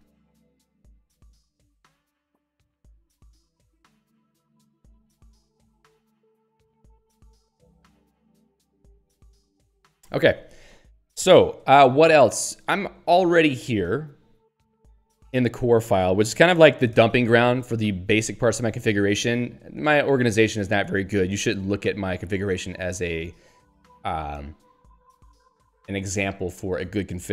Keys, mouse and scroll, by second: 14.2 scroll up 1, 16.1 click, 16.9 alt+<, 22.6 ctrl+n.